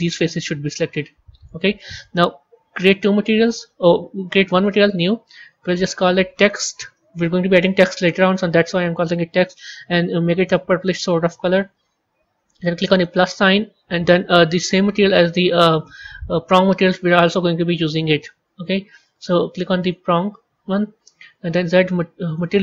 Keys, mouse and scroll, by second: 2.7 click, 4.4-5.6 drag, 5.7-8.7 drag, 9.2 click, 12.8-16.9 drag, 21.4 z.